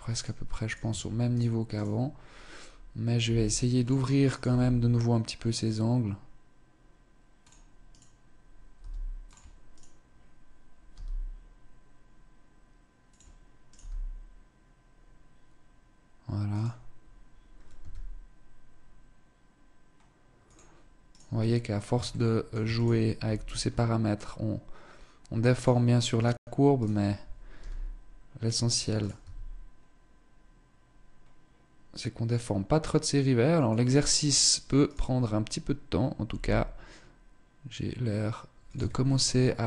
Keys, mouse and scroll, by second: 0.2 right click, 0.4 Tab, 0.8 right click, 1.3 right click, 2.8 g, 3.8 right click, 4.0 g, 7.4 right click, 8.3 g, 9.3 right click, 10.5 g, 13.2 right click, 13.4 g, 17.3 s, 20.6 right click, 21.0 scroll down 1, 21.6 shift+middle click, 22.2 right click, 22.8 s, 25.7 right click, 26.2 right click, 27.0 g, 27.9 click, 28.4 right click, 28.7 s, 33.6-34.0 scroll down 2, 34.0 right click, 34.6-35.7 scroll up 2, 35.7 g, 38.2 Tab, 38.5-39.1 scroll down 2.